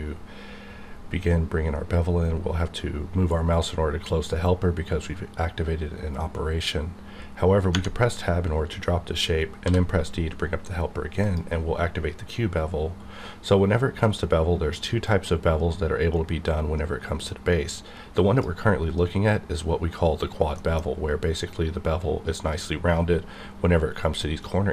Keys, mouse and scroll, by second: 2.0-2.4 scroll up 1, 7.7 Tab, 9.6 d, 11.2 click, 15.0-20.6 drag, 20.6 middle click, 20.8 scroll up 1, 23.0-24.0 scroll down 1.